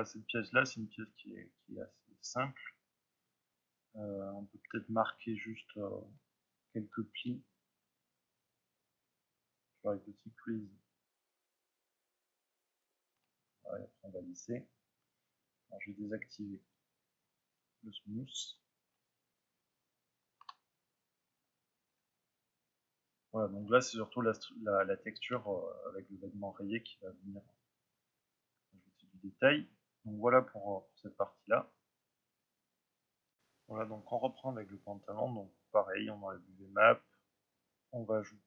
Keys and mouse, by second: 1.0-8.3 middle drag, 7.1 f, 8.3 click, 10.0-12.7 drag, 12.8-20.6 drag, 20.6-21.2 middle drag, 21.4-28.9 middle drag.